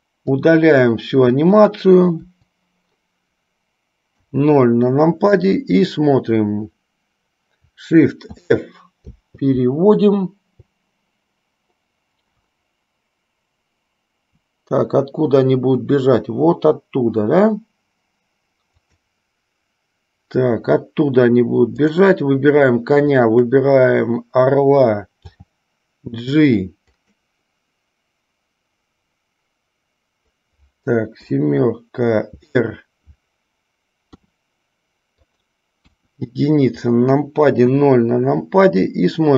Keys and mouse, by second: 0.5-1.7 drag, 22.0 click, 38.0 KP_0.